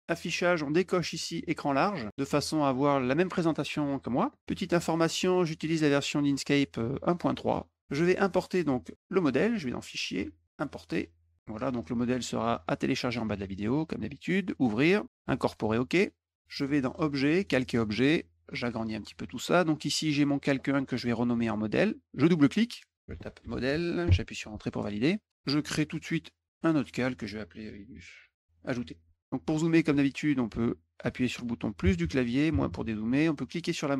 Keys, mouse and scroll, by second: 1.2 click, 2.0 click, 4.5 click, 5.5 click, 9.7 click, 10.5 click, 11.6 click, 14.5 click, 15.4 click, 16.8 click, 17.3 click, 18.6 click, 19.9 click, 22.7 click, 22.8-23.8 typing, 22.8 click, 24.0 Return, 26.7 click, 27.6-28.5 typing, 28.5 click, 33.5 middle click.